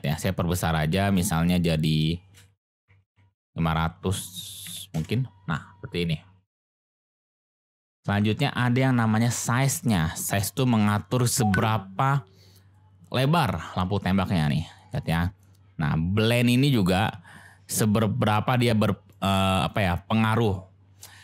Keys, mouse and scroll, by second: 0.6 click, 1.5-5.5 drag, 3.1 0, 9.7-15.4 drag, 16.3-19.1 drag.